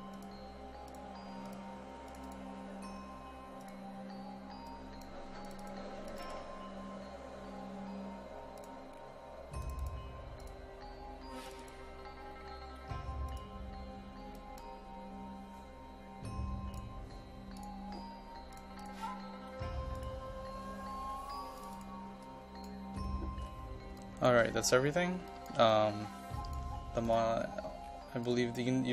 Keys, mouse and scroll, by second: 9.0-9.6 scroll down 1, 9.6 click, 12.8 click, 23.1-23.4 scroll down 1, 23.4 scroll up 1, 24.0 ctrl+click, 24.6-25.2 scroll up 1, 25.3-27.0 ctrl+drag, 27.4-28.3 scroll down 1, 28.3-28.9 drag.